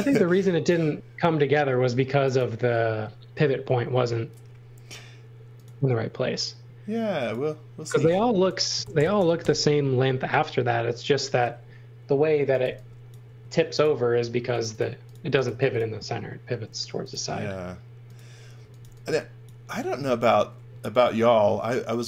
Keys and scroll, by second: 8.5-9.6 typing, 12.1-13.2 typing, 14.9-16.4 typing, 18.3-19.7 typing, 21.0 r.